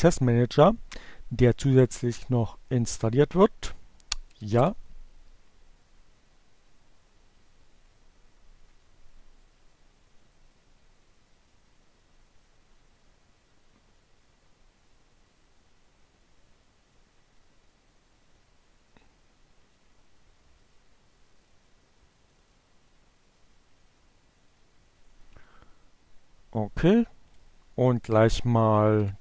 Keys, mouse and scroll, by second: 4.6 j, 4.8 Return, 26.4 click, 27.3 click, 27.7 shift+7, 29.0-29.2 typing.